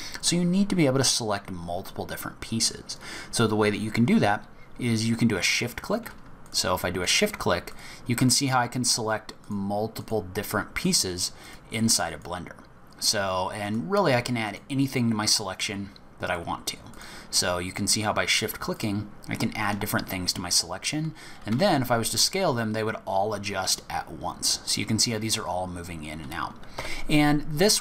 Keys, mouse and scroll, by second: 6.4 shift+click, 7.0 shift+click, 7.6 shift+click, 8.2 shift+click, 8.8 shift+click, 9.4 shift+click, 10.0 shift+click, 10.8 shift+click, 11.4 shift+click, 12.1 shift+click, 13.6 shift+click, 14.4 shift+click, 16.2 shift+click, 16.9 shift+click, 17.9 shift+click, 18.7 shift+click, 19.7-20.0 shift+scroll down 2, 20.0-20.5 shift+scroll up 1, 21.5 s.